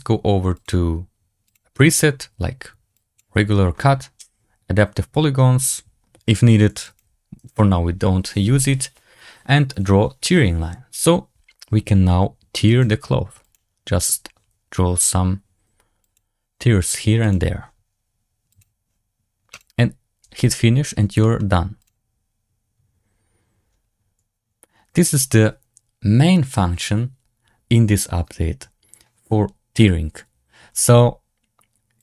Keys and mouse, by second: 0.6-1.5 drag, 1.8-3.1 drag, 6.7 click, 9.6 click, 12.6 click, 13.3 click, 15.9 click, 17.1 click, 18.4 click, 19.4 click, 21.1 middle drag, 21.8 click.